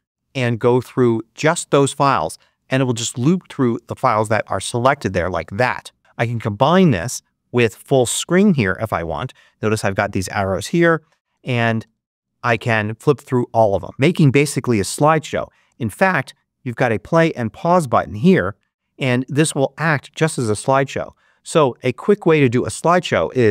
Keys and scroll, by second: 10.7 Right, 20.9 Escape, 22.1 space.